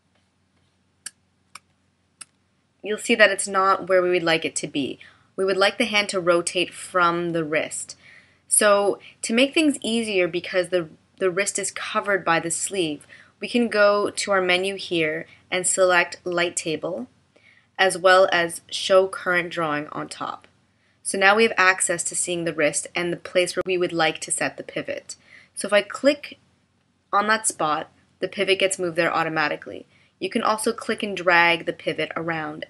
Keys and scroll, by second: 1.6 space.